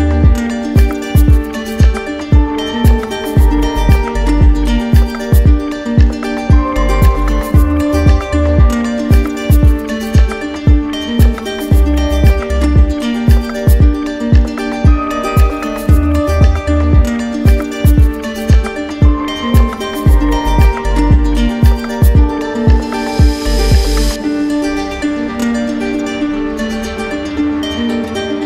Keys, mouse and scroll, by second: 0.1-1.1 drag, 2.5-3.6 drag, 4.2-5.3 drag, 6.0-7.9 drag, 8.2 r, 12.3-13.4 drag, 15.3-17.0 drag, 18.2 click, 18.7 alt+click, 19.5 click, 20.0 click, 20.1 alt+click, 20.4 click, 21.1 shift+click, 21.3 click, 22.8 click, 25.9 shift+click, 27.0 click, 27.5 shift+click.